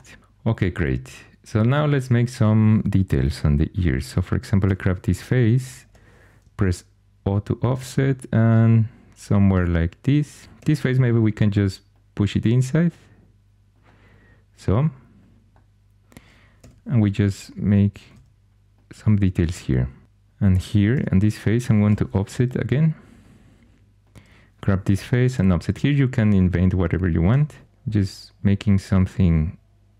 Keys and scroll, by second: 4.6 3, 5.8 o, 10.5 3, 16.5 2, 20.8 3, 21.8 o, 24.9 o, 27.3 3.